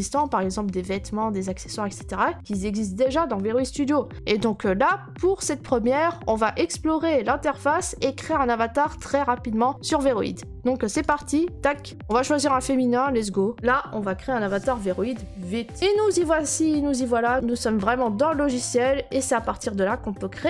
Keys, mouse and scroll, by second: 11.1 click, 17.3 middle click, 17.6-19.0 scroll.